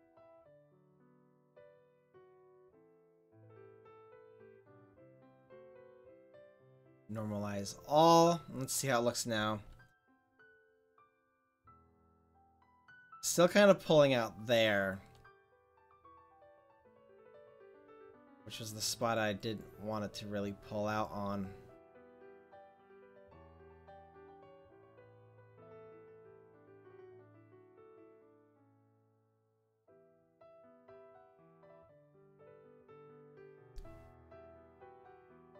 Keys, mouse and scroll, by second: 1.4 click, 1.6-3.1 middle drag, 3.1-6.7 drag, 6.7-7.3 middle drag, 7.5-8.3 middle drag, 8.4 middle click, 10.3 r, 16.5 middle click, 17.0-18.0 middle drag, 18.0-21.6 drag, 22.7-23.9 drag, 25.7-28.8 drag, 28.8 middle click, 30.5 r.